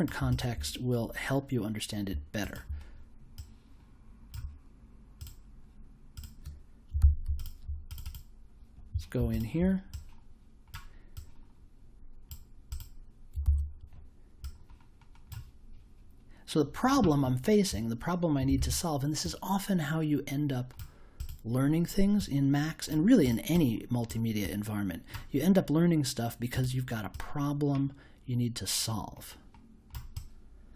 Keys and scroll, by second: 6.9 super+c, 13.4 super+v, 18.5 super+a.